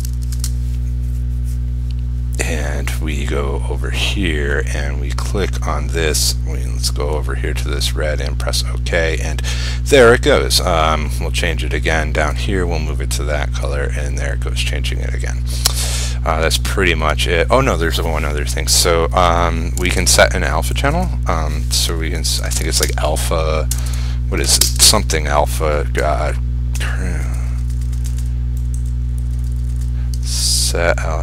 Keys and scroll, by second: 0.1 ctrl+shift+q, 0.5 ctrl+r, 19.9 ctrl+u, 20.1 ctrl+i, 22.9 ctrl+space.